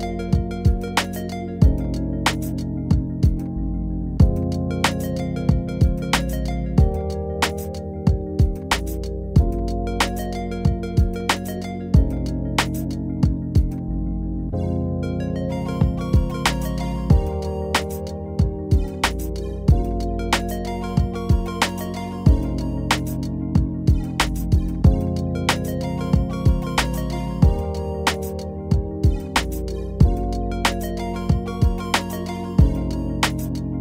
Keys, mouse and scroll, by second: 2.5 click, 10.0-26.0 ctrl+drag, 29.6 click, 32.0 click.